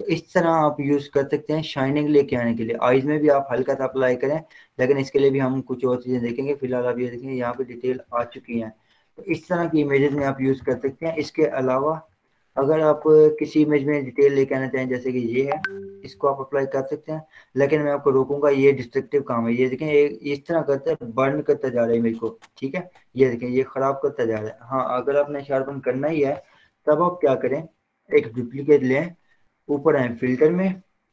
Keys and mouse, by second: 0.2 z, 1.4-6.7 drag, 8.7 ctrl+0, 9.7 ctrl+w, 10.2 Down, 10.7 Return, 11.8 z, 13.3-24.9 drag, 24.9 ctrl+z, 26.5 ctrl+0, 27.4 z, 30.4 click.